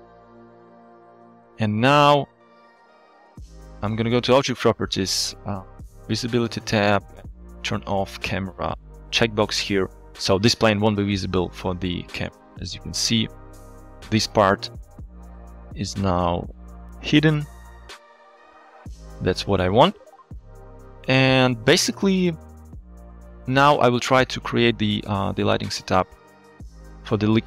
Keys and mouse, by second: 1.2 alt+shift+z, 2.9 click, 4.4 click, 6.2 drag, 8.0 click, 12.3 click, 12.7 click, 13.0 click, 16.7 click, 19.1 click, 20.2 shift+drag, 22.8 shift+middle click.